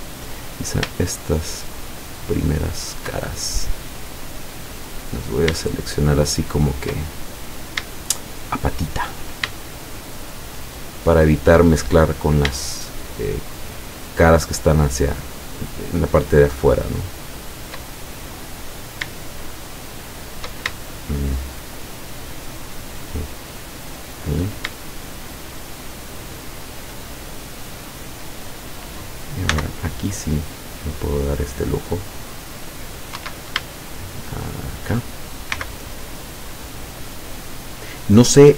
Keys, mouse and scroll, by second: 1.2 shift+right click, 2.1 shift+right click, 3.3-4.4 shift+middle drag, 4.5-5.1 scroll up 1, 6.3 shift+right click, 7.0 shift+middle click, 8.7 shift+right click, 10.1 shift+right click, 10.7 shift+right click, 11.2 shift+right click, 12.7-13.7 shift+middle drag, 14.2 shift+right click, 15.0 shift+right click, 15.6 shift+right click, 17.3 shift+right click, 17.9 shift+middle click, 19.9 shift+right click, 20.8 shift+middle click, 22.5 shift+right click, 23.9 shift+right click, 24.8-26.8 shift+middle drag, 27.3-27.8 shift+scroll down 1, 28.3-28.6 scroll up 2, 29.6 c, 30.5-33.1 drag, 33.2 Escape, 33.9-35.0 shift+middle drag, 35.6 c, 36.6-37.9 drag.